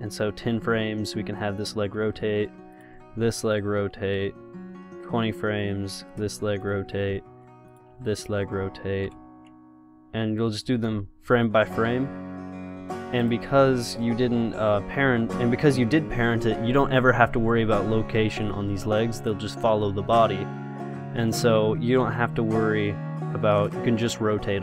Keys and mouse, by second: 0.9 r, 2.2 i, 3.0-5.0 drag, 3.3 r, 4.4 i, 5.8-7.5 drag, 6.3 r, 7.3 i, 8.2 r, 9.3 i, 11.1 r, 12.1 i, 13.7 r, 15.6 i, 19.4-21.1 drag, 21.3-23.0 drag.